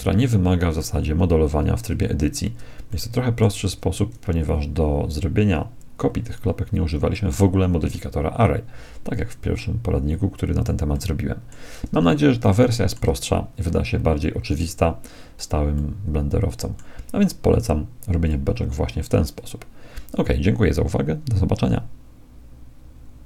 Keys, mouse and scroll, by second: 2.9-4.9 middle drag, 7.9-9.7 middle drag, 10.9-14.3 middle drag, 14.7-17.5 middle drag, 18.3-21.1 drag.